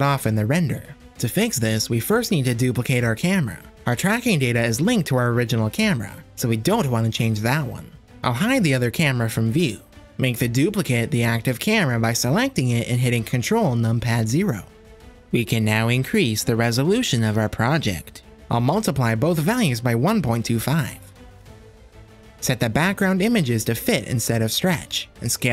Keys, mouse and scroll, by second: 1.0 click, 2.6 shift+d, 5.2 click, 5.4-8.5 drag, 9.6 click, 10.1 click, 10.7 click, 12.6 ctrl+KP_0, 16.1-19.0 drag, 19.3-21.9 drag, 22.5 click, 24.4 click.